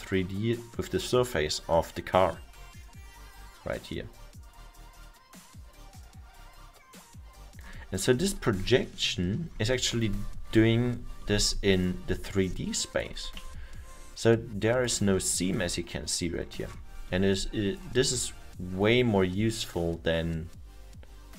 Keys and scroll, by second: 10.5 F2, 13.4 e, 18.0 r.